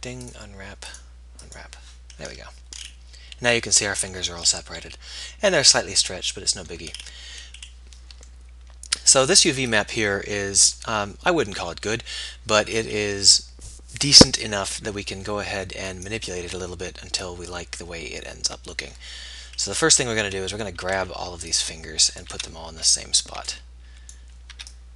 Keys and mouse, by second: 18.3-20.6 middle drag, 20.6 a, 21.2 a, 22.6 a, 22.6 b.